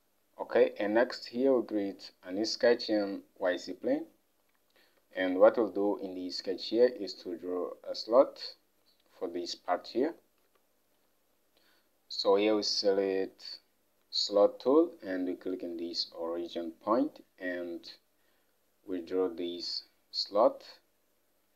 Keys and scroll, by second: 5.1 alt+Tab.